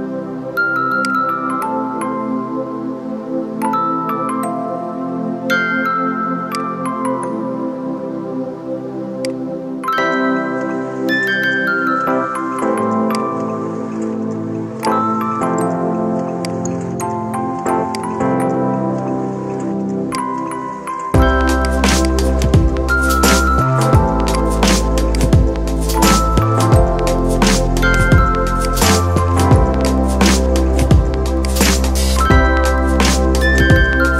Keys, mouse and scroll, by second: 0.8 alt+click, 4.9 ctrl+z, 6.4 shift+click, 9.0-21.0 alt+drag, 21.0 alt+scroll up 1, 21.4 space, 21.4 click, 21.9 space, 24.2 click, 28.4 click, 31.3-34.1 shift+drag.